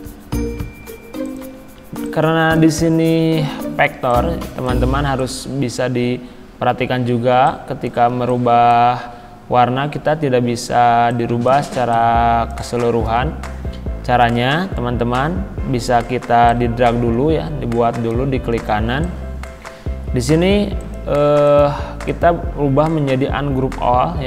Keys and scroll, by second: 18.7 z.